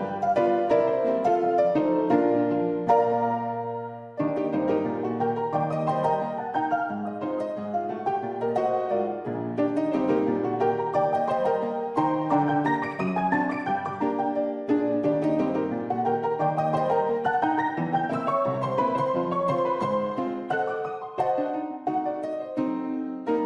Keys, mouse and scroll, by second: 1.8 shift+a, 5.0-6.3 drag, 7.3 g, 10.6 Tab, 10.9 s, 12.6 click, 15.5 s, 17.5 shift+click, 17.9 click, 18.7 g, 22.0 click, 22.8 Tab.